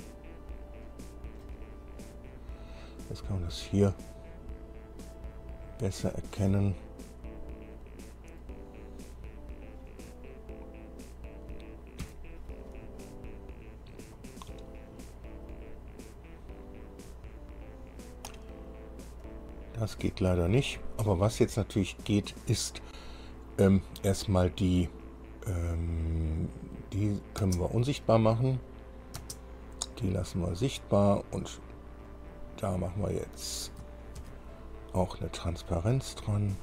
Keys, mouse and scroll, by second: 2.3 scroll up 2, 2.9 scroll up 2, 4.6 scroll down 2, 5.3-8.8 middle drag, 12.3 KP_5, 13.7-14.0 scroll up 1, 14.3 scroll up 1, 15.8 click, 19.5 click, 20.2 click, 22.3 click, 27.6 space, 28.9 click, 29.4 space, 30.1 click, 30.8 click, 32.3 click, 33.5 click, 34.4 ctrl+d, 36.1-36.6 drag.